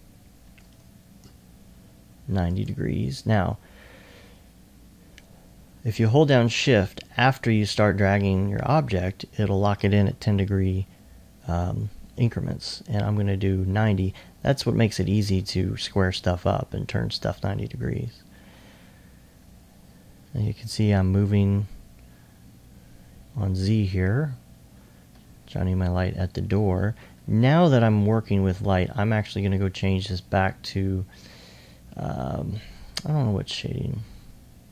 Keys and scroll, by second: 16.0 alt+e, 17.8 e, 26.5 alt+1, 27.1-27.9 typing.